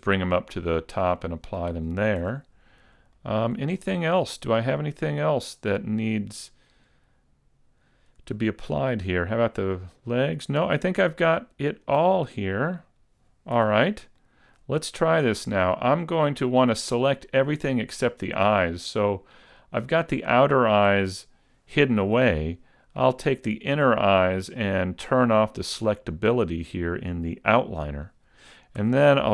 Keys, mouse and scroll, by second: 0.3 click, 1.4 click, 2.2 a, 2.6-3.2 scroll down 2, 3.2 shift+middle click, 3.8-4.6 scroll up 1, 4.6 right click, 4.6-5.0 scroll up 1, 5.0 middle click, 6.4 right click, 6.8-7.8 scroll down 1, 7.8 scroll down 2, 8.4 shift+middle click, 9.2 right click, 11.2 scroll up 2, 11.9 right click, 13.0 scroll down 1, 13.6 a, 13.8-14.4 scroll down 2, 14.2 shift+middle click, 14.8-15.2 scroll up 2, 26.3 click, 28.8 a.